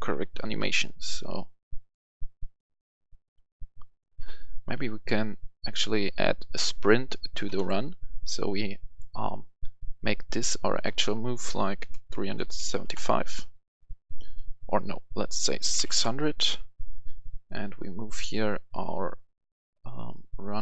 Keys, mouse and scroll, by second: 0.3-1.3 typing, 2.6-3.3 typing, 7.5 Escape, 8.8 click, 11.7-12.5 typing, 12.8 Return, 14.9 Return, 15.3-15.7 typing, 15.8 Return, 18.0-20.6 drag.